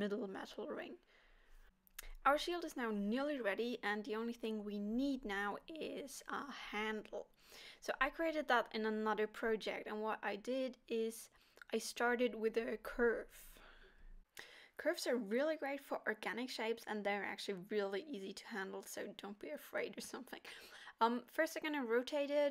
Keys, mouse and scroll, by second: 0.2 alt+a, 0.3 scroll down 3, 0.5 middle click, 3.1 scroll down 2, 3.4 middle click, 4.0-5.3 scroll up 3, 6.7 middle click, 6.7 click, 7.5-8.2 scroll up 2, 8.7 shift+a, 12.9-13.4 scroll down 2, 13.4 middle click, 17.0-18.0 scroll down 1, 18.0 middle click, 18.0 shift+a, 20.1 r, 21.8 middle click.